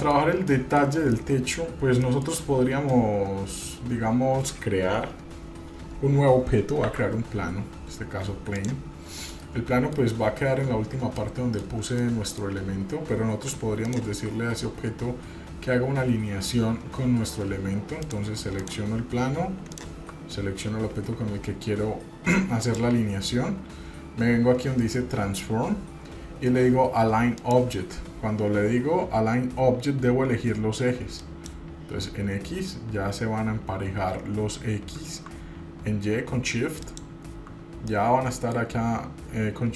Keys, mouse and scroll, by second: 0.0 middle click, 0.7 shift+middle click, 1.3 middle click, 2.2 shift+middle click, 3.1-3.9 middle drag, 7.0 shift+a, 9.2 scroll down 2, 9.5-10.2 middle drag, 11.4-11.8 middle drag, 11.8 scroll down 1, 12.1-12.5 shift+middle drag, 14.0 shift+click, 18.2 click, 18.8 drag, 19.9 shift+click, 22.8-27.7 drag, 31.4 click, 37.0 shift+click, 38.1-38.8 middle drag.